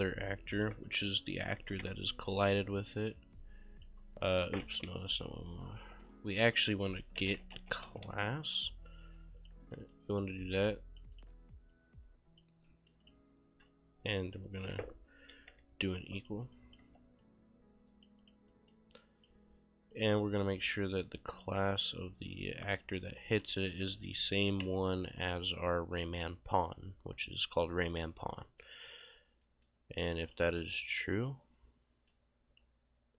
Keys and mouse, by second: 1.6 =, 2.5 click, 5.1 Delete, 6.1 click, 7.0-8.6 typing, 9.5 click, 9.8 right click, 10.2 click, 12.7 right click, 13.1 click, 15.4 =, 16.2 click, 16.9 q, 17.3 click, 18.6 right click, 19.1 click, 21.4 click, 24.2-25.2 typing, 28.0 click, 28.4 right click, 30.3 click, 31.6 right click.